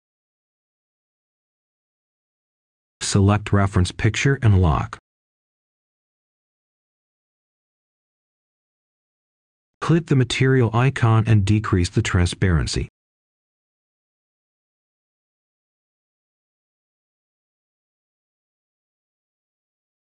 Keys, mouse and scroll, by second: 1.4 right click, 1.8-2.8 scroll up 1, 2.8 click, 4.1 i, 5.1 Return, 6.6 right click, 8.8 click, 12.0-13.2 scroll down 1, 13.2 click, 17.0 right click, 17.7-19.2 scroll up 1, 19.2-20.1 drag.